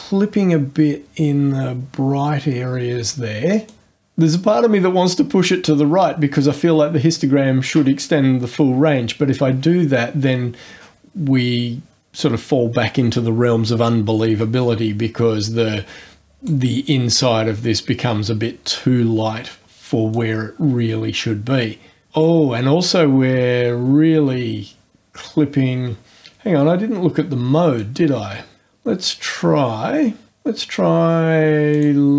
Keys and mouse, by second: 3.7 click, 15.4-16.7 drag, 20.1-22.4 drag, 27.8 click, 31.7 click.